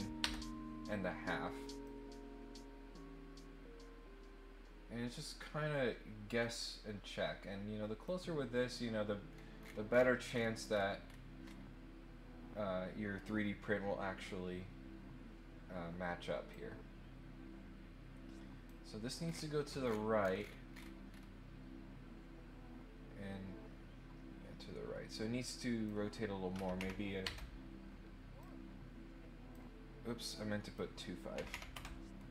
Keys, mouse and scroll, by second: 1.8-8.0 drag, 9.3 scroll up 1, 9.5 middle click, 9.9 middle click, 10.3-11.5 scroll up 4, 16.5-18.6 drag, 19.2 scroll down 1, 19.8-20.3 scroll down 2, 20.4-21.2 scroll up 4, 25.1 click, 28.3-29.5 drag, 30.3 click.